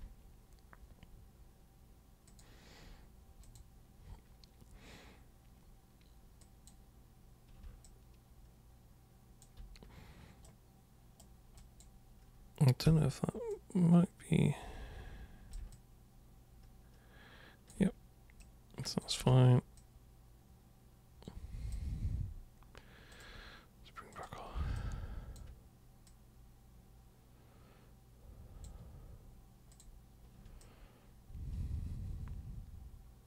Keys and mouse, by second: 2.2 super+click, 3.4 super+click, 6.4 super+click, 7.8-9.4 alt+super+drag, 10.4 super+right click, 11.6 super+click, 12.9 super+w, 13.5-15.5 super+drag, 15.7-17.7 alt+super+drag, 18.4-19.0 super+drag, 19.3 ctrl+super+z, 19.7-21.7 super+drag, 23.1 super+click, 24.1 super+click, 24.7 alt+super+click, 26.0-28.6 super+drag, 29.7 super+click, 30.6-33.2 alt+super+drag.